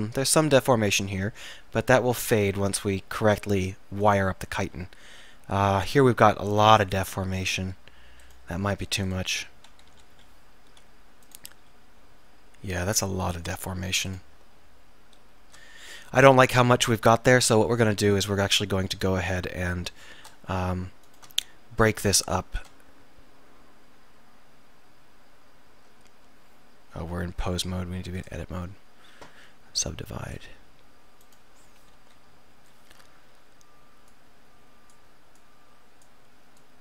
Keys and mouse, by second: 3.3-4.6 right drag, 4.6 r, 10.0 KP_1, 10.2 KP_3, 11.6 r, 14.3 click, 32.0 KP_1, 32.6 KP_3.